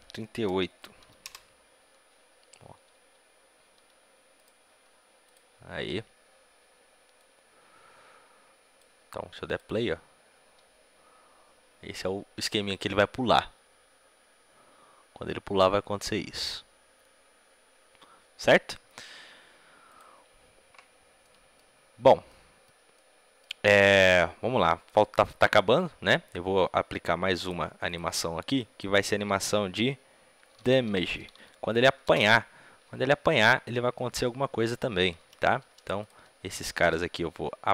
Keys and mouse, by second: 3.7 g, 4.5-7.1 right drag, 4.5 g, 7.1-11.1 drag, 19.8-21.8 drag, 21.8-27.3 middle drag, 27.8-31.9 drag, 33.3-37.7 middle drag.